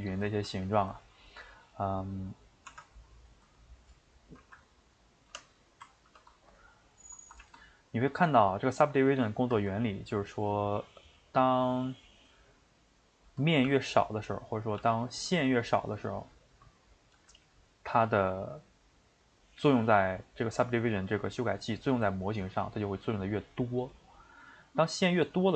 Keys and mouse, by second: 0.1 ctrl+z, 0.3 ctrl+z, 0.9-2.3 middle drag, 2.3 click, 2.8 Tab, 3.1 click, 4.4 ctrl+r, 7.4 ctrl+z, 7.6 middle click, 8.3 shift+right click, 8.6-11.4 ctrl+middle drag, 11.4 click, 12.0-13.7 middle drag, 13.7 g, 14.5 click, 14.8 g, 15.8 click, 16.1 shift+middle click, 16.9 click, 17.1 g, 17.8-25.5 middle drag.